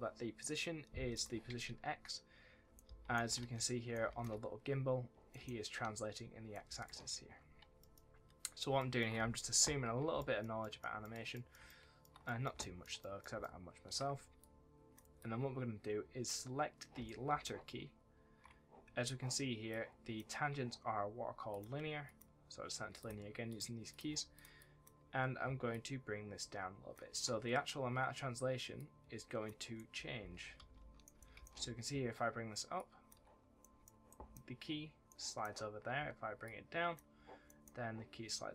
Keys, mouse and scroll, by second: 2.8 s, 3.2 shift+a, 3.9 a, 5.2 right click, 5.3 w, 6.4 right click, 6.6 w, 7.4 scroll down 1, 8.3 middle click, 8.7 shift+middle click, 9.7-10.0 scroll down 1, 10.1 shift+middle click, 11.2 middle click, 11.6 shift+middle click, 12.2 middle click, 12.5 shift+middle click, 13.3 shift+middle click, 14.3 click, 17.0 right click, 17.2 w, 19.6 click, 24.5 double click, 25.6 shift+click, 28.7 click, 29.7 right click, 29.9 w, 30.1 d, 30.7 w, 31.1 right click, 31.3 s, 33.5 right click, 36.4 shift+click, 37.4 right click.